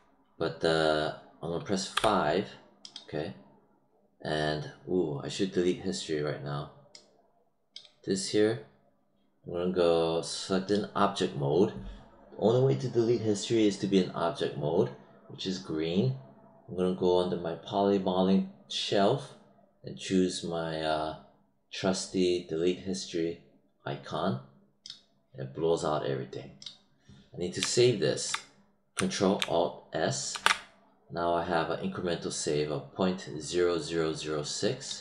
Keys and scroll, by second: 1.8 5, 30.2 ctrl+alt+s.